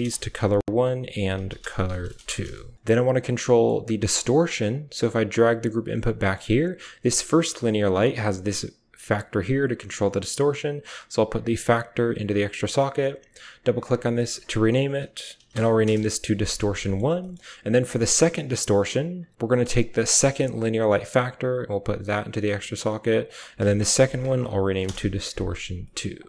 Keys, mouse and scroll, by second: 0.6-2.2 drag, 2.2 middle click, 2.9 click, 3.0 middle click, 3.3 click, 3.4 middle click, 4.5-5.9 drag, 5.9-7.4 typing, 6.8 click, 7.8-9.8 drag, 10.7-11.8 drag, 11.9 click, 12.1 typing, 13.4 click, 13.7 click, 15.6-16.6 middle drag, 16.7 drag, 17.9 g, 19.7 click, 19.9-24.0 typing, 20.9-22.1 drag, 23.1 click, 23.6 click, 25.7 drag, 26.0 click.